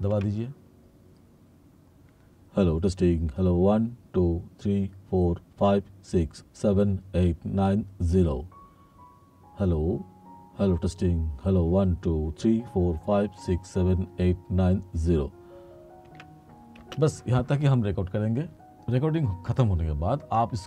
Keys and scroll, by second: 0.2 3, 16.1 3, 16.9 space.